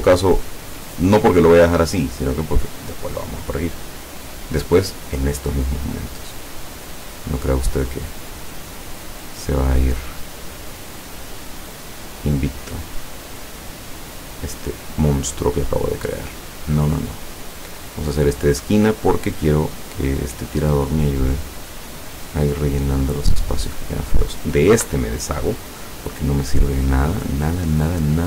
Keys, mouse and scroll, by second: 0.1 click, 0.5 click, 2.8 click, 6.5-8.2 drag, 8.8-10.0 drag, 11.3-12.7 drag, 13.7 click, 14.5-16.2 drag, 18.0 click, 19.4-22.0 drag, 23.8 click, 24.8 Delete, 26.7-28.2 drag.